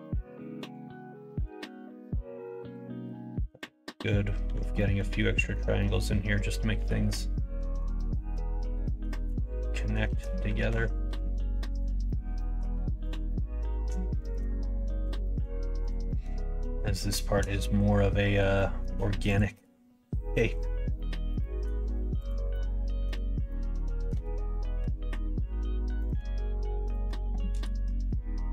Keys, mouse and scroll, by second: 3.2 shift+middle click, 4.4 l, 4.8 middle click, 5.3 middle click, 5.7 middle click, 6.7 2, 7.6 alt+z, 7.9 middle click, 8.7 alt+z, 10.0 shift+z, 10.5 alt+z, 11.3 alt+z, 11.7 click, 12.0 middle click, 12.3 middle click, 12.7 2, 13.0 click, 13.2 middle click, 14.2 shift+click, 15.0 f, 15.2 middle click, 16.0 middle click, 16.5 middle click, 17.4 middle click, 18.5 middle click, 19.3 shift+click, 20.2 f, 20.3 middle click, 20.9 middle click, 21.3 shift+middle click, 22.1 click, 22.5 middle click, 23.4 middle click, 24.7 k, 27.7 middle click.